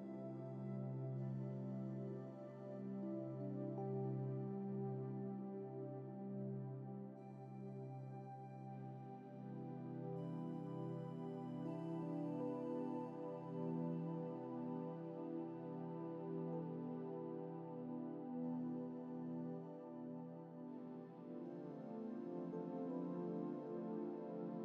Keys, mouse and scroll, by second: 8.9-11.2 shift+middle drag, 18.5-19.0 scroll down 2, 21.6-24.6 middle drag.